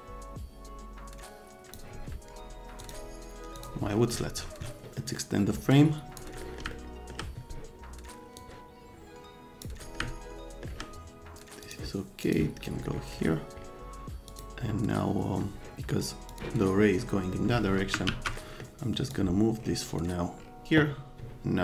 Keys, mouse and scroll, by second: 2.8 click, 3.6 click, 4.9 right click, 5.7-6.2 drag, 6.4 right click, 6.8 right click, 8.4 middle click, 8.5-9.6 drag, 10.0 middle click, 11.6 click, 12.2 click, 12.7 right click, 14.3 click, 16.3 click, 17.3 middle click, 18.1 z, 18.4 middle click, 19.1-20.6 drag.